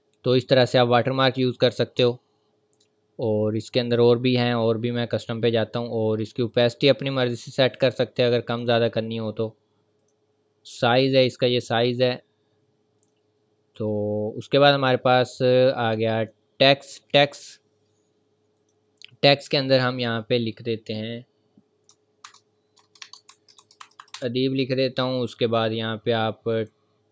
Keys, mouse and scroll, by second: 0.2 scroll down 1, 1.0-1.4 scroll up 1, 2.4 ctrl+scroll down 1, 2.5 ctrl+v, 3.7 click, 16.2 click, 22.8 BackSpace, 26.3 typing, 26.5 click.